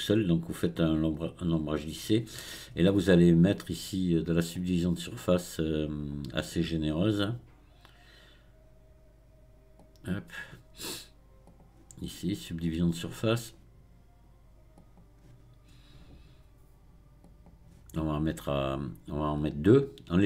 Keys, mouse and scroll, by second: 4.5-7.7 drag, 9.8-11.6 drag, 12.7-17.8 drag, 19.4-20.2 drag.